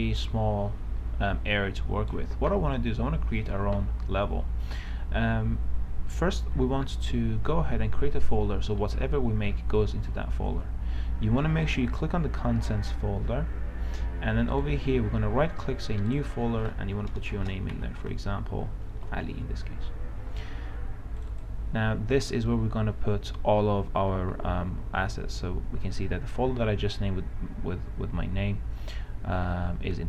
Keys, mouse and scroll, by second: 5.2 click, 14.8 right click, 16.4 click, 17.6 shift+a, 17.9 shift+l, 18.4 shift+i, 19.3 shift+Return, 21.5 click.